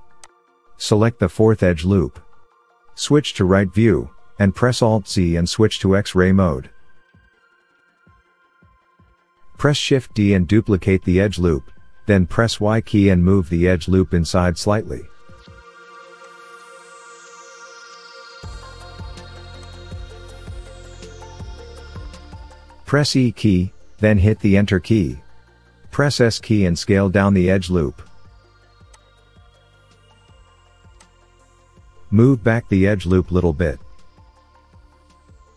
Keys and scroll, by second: 0.0 alt+n, 4.6 KP_3, 7.5 alt+z, 11.3 shift+d, 15.3 y, 17.3 y, 18.7 g, 18.8 y, 22.7 e, 23.6 Return, 27.0 s, 30.6 s, 31.8 g, 32.0 y.